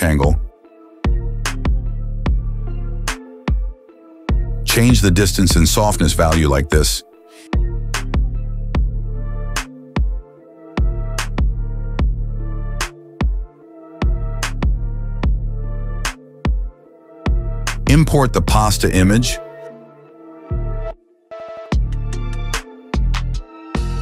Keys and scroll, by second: 3.6 Return, 4.9 KP_0, 5.1 Return, 11.9 KP_0, 12.2 Return.